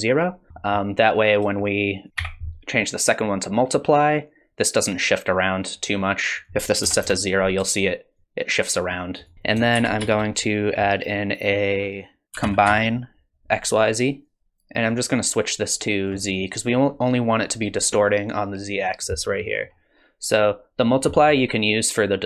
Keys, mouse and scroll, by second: 0.5 scroll up 2, 0.6 middle click, 2.1 click, 3.9 shift+click, 6.4 click, 8.2 shift+click, 9.3 middle click, 9.3 click, 9.3 scroll down 3, 9.8 shift+a, 14.9 click, 19.2-20.8 scroll up 2, 19.5 middle click, 20.8-22.2 scroll up 2, 21.1 middle click.